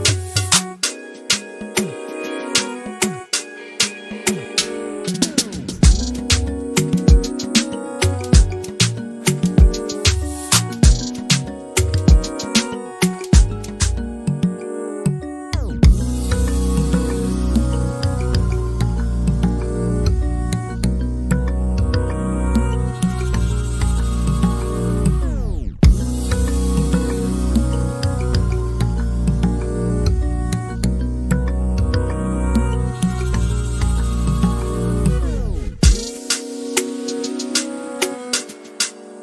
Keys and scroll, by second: 0.0-0.4 typing, 2.8-3.7 typing, 6.7 f, 8.5-13.8 typing, 16.1-17.7 typing, 18.7-19.5 typing, 21.1 p, 22.7-24.1 typing, 37.1-39.2 typing.